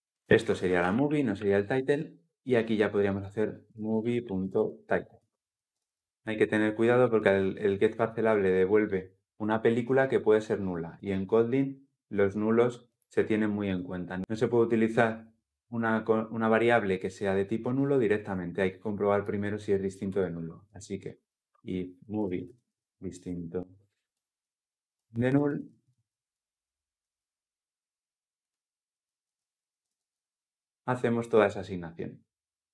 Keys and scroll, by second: 1.5 Escape, 4.9 Return, 5.4 ctrl+alt+l, 5.6 ctrl+alt+o, 29.6 ctrl+alt+l.